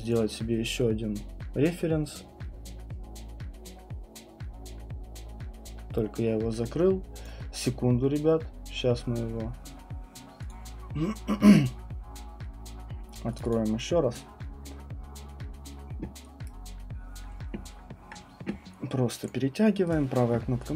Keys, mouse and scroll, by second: 0.1 click, 7.3 click, 10.5 click, 13.4 click, 13.5 click, 16.5 right click, 19.3 click, 19.9 right click, 20.6 click.